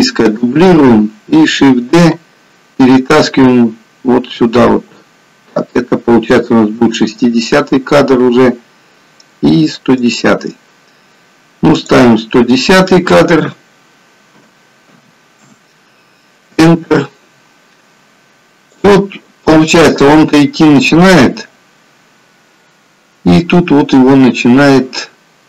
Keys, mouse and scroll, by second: 2.2 shift+d, 11.9 click, 19.1 click.